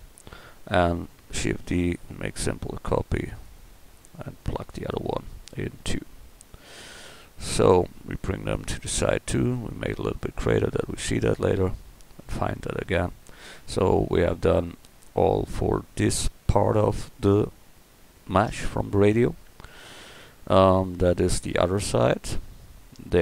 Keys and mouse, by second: 1.5 shift+d, 3.7 s, 5.5-6.0 drag, 6.7 middle click, 9.6 s, 11.1 a, 17.2 middle drag.